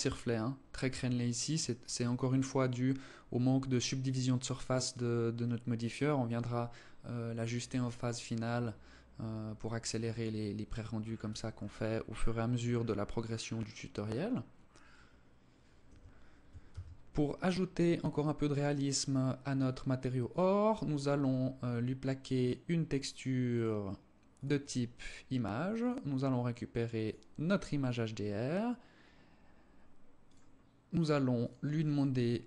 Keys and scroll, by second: 15.1 Escape, 16.0 ctrl+s.